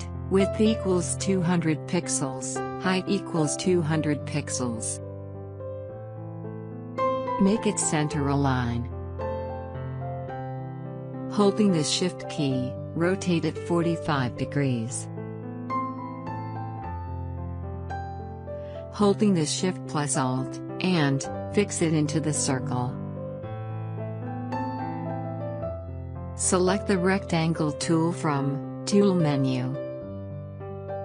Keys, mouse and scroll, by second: 2.2 2, 3.3-3.7 typing, 5.2 Tab, 6.8-7.5 typing, 8.4 click, 15.6 click, 15.8-19.6 drag, 30.2 click.